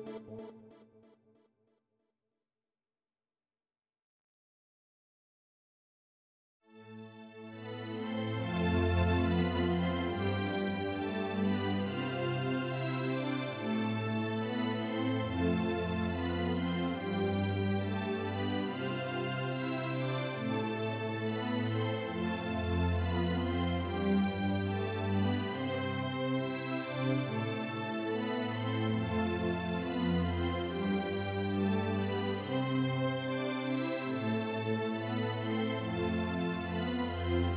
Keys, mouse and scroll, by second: 0.3 space, 2.2 click, 5.6 click, 6.4 space, 6.9-11.0 drag, 11.4 click, 18.7-20.2 drag, 21.4-22.8 drag, 27.8-28.6 drag, 28.9-29.8 drag.